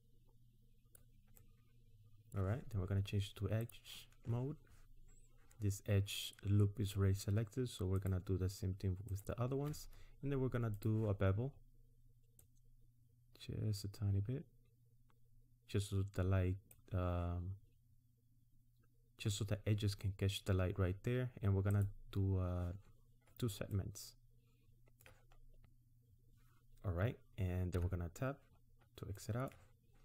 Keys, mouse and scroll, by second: 1.5 middle click, 3.7 click, 7.9 alt+shift+click, 10.8 click, 11.6-12.4 scroll up 1, 12.4 click, 21.7 click, 23.8 middle click, 25.4-26.2 scroll down 1, 27.6 Tab, 28.6 scroll down 1, 29.1 middle click.